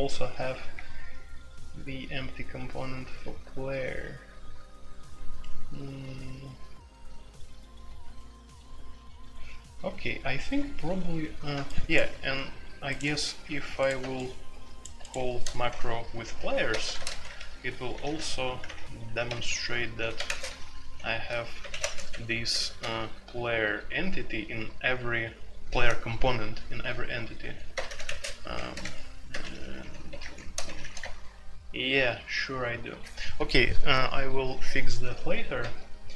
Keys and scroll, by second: 13.1 ctrl+g, 15.6-20.4 typing, 21.6-23.3 typing, 27.4-31.0 typing.